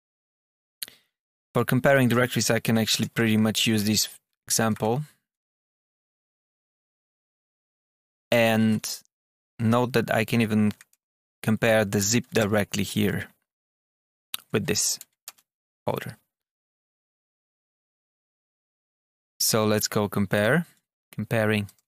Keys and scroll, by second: 1.4 Tab, 2.0 Return, 2.5 Tab, 2.8 Page_Up, 3.0 Return, 3.6 Page_Up, 3.7 Return, 4.2 Tab, 4.6 Page_Up, 5.2 space, 6.0 space, 6.1 Down, 6.4 Tab, 7.0 Return, 7.4 Down, 8.1 Page_Up, 8.2 Return, 9.2 Down, 10.2 Tab, 10.6 Page_Up, 10.8 Return, 12.6 Tab, 13.7 Return, 14.4 Tab, 14.9 Down, 15.2 Return, 20.6 Escape.